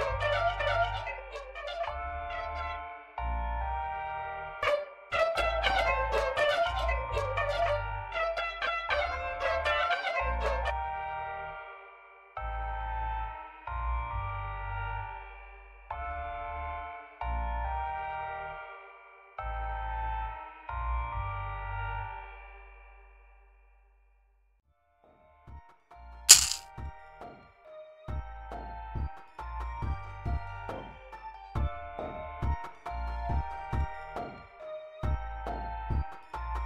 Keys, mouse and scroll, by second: 0.7-4.4 middle drag, 4.4 l, 7.1 click, 7.4 middle click, 9.2-10.3 drag, 10.6 space, 17.4-18.5 drag, 25.6-27.1 drag, 31.5-34.0 drag.